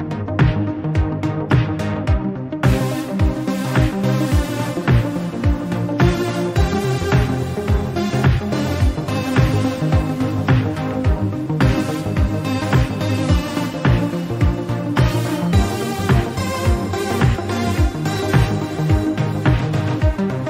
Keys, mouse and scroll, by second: 1.0-2.9 drag, 3.3-5.2 drag, 5.4 KP_1, 5.8-6.5 scroll up 1, 6.5 click, 8.3-10.0 drag, 13.2 click, 13.5-14.1 shift+middle drag, 14.1 alt+z, 14.5 Tab, 14.7 click, 15.4-17.4 shift+middle drag, 19.1-20.4 middle drag.